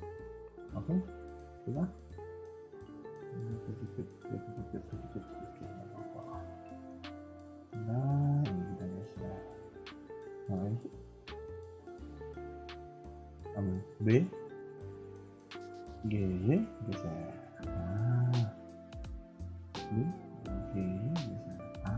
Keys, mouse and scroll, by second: 4.9 KP_1, 5.2 KP_3, 5.4 KP_1, 6.0 Tab, 6.4 middle click, 6.9 KP_3, 7.5 shift+middle click, 7.8 Tab, 8.0-8.8 scroll up 2, 8.8 click, 10.7 click, 11.6 b, 12.9 scroll up 1, 13.1 a, 13.3 a, 13.5 b, 16.4 g, 18.1 a, 18.3 a, 18.6 shift+middle click, 19.1 b, 20.4 g.